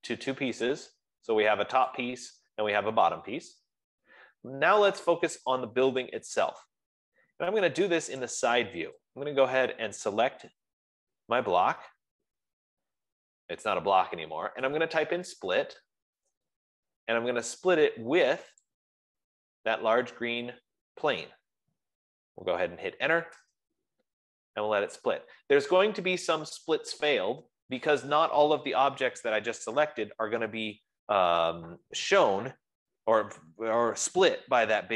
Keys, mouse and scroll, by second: 0.2 Escape, 1.4 click, 2.6 click, 4.3 Escape, 7.5-8.0 scroll, 8.7 click, 10.9 click, 14.8-16.6 typing, 18.8 typing, 19.0-23.9 drag, 23.5 Return, 25.0 Return.